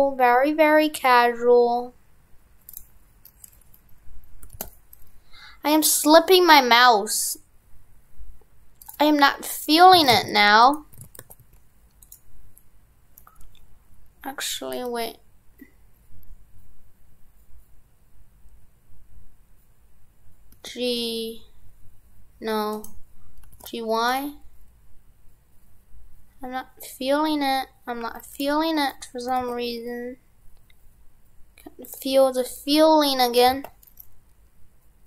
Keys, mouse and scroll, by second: 10.0 shift+f, 10.6 right click, 11.0 shift+f.